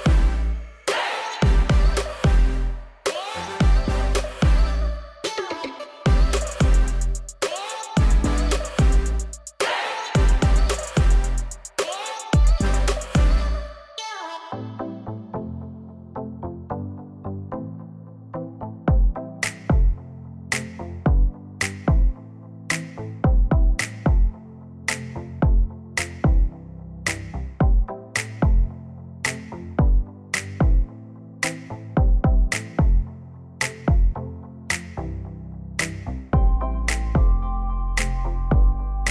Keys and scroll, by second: 4.3 ctrl+shift+a, 19.9 ctrl+d, 24.1 ctrl+shift+f, 31.8 ctrl+d, 38.0 ctrl+d.